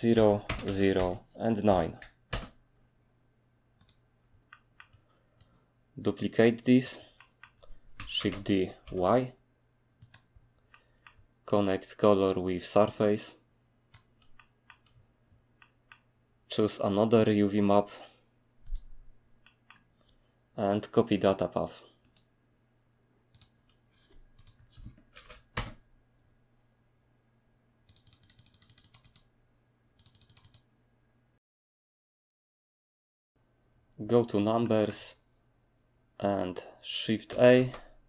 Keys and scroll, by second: 0.0-2.1 typing, 0.6 Tab, 1.0 Tab, 2.3 Return, 4.2 typing, 7.3-8.8 typing, 13.9 typing, 25.1 ctrl+v, 25.5 Return, 37.5 a.